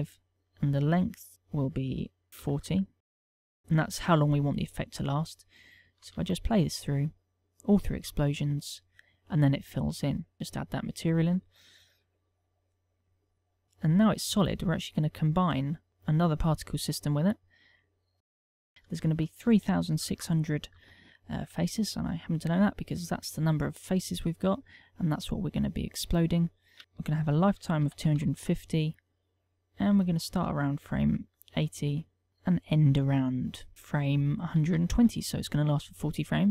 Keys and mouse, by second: 1.6 ctrl+click, 6.9 alt+a, 10.6 click, 11.3 click, 13.0 click, 13.6 click, 14.5 click, 18.2 click, 18.5 click, 19.3 ctrl+click, 23.1 Tab, 24.9 Tab, 27.8 ctrl+click, 30.9 ctrl+click, 33.3 click.